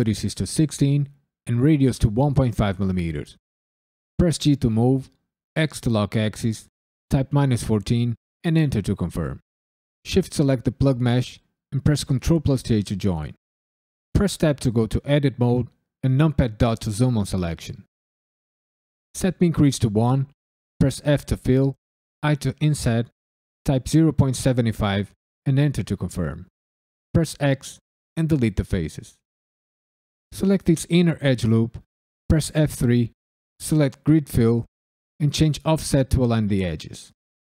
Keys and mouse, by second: 4.3 g, 5.5 x, 7.1 KP_Subtract, 7.4 KP_1, 7.7 KP_4, 8.4 KP_Enter, 9.9 shift+click, 11.8 ctrl+j, 14.1 Tab, 16.3 KP_Decimal, 19.1 click, 21.0 f, 22.2 i, 23.6 KP_Decimal, 24.0 KP_7, 24.2 KP_5, 25.4 KP_Enter, 27.3 x, 30.1 alt+click, 32.2 F3, 36.2 click.